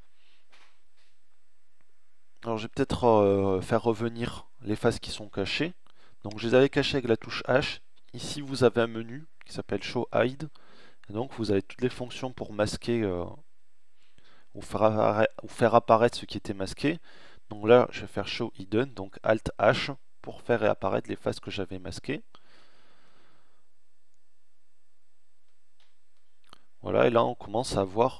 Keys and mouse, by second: 2.0 Tab, 21.5 alt+h, 24.9 Tab.